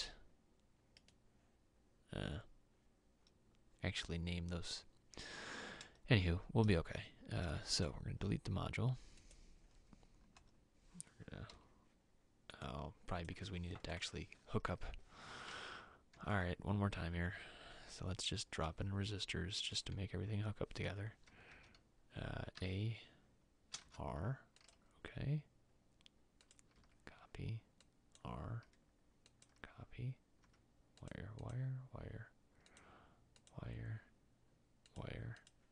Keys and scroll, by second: 10.5 Delete, 11.7 m, 15.7 alt+Tab, 21.1 Escape, 28.8 c.